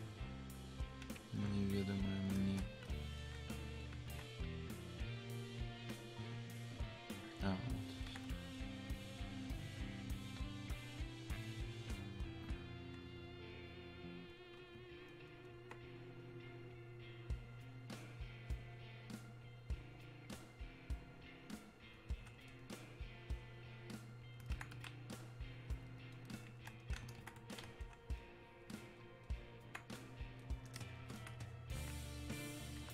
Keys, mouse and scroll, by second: 10.3-14.3 drag, 14.3-27.8 ctrl+drag, 27.8-29.3 drag, 30.5-31.8 drag, 31.8-32.9 alt+drag.